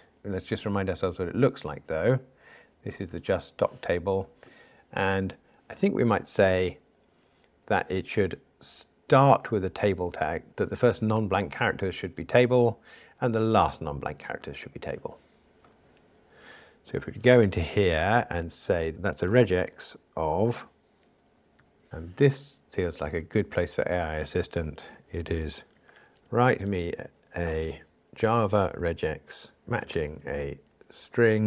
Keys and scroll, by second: 29.6 alt+shift+Left.